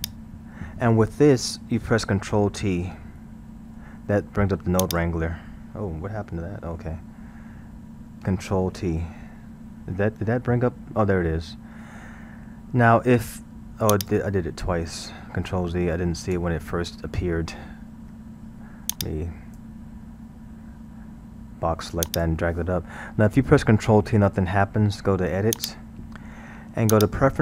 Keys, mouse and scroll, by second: 0.0 click, 3.7 ctrl+t, 4.8 click, 5.9 scroll, 9.0 ctrl+t, 9.4-10.3 scroll, 10.3-12.9 middle drag, 12.9 g, 15.5 ctrl+z, 16.3 ctrl+z, 19.0 click, 21.2 g, 22.7-23.6 middle drag, 23.6-24.4 scroll, 24.4-25.5 middle drag, 25.5-27.4 drag.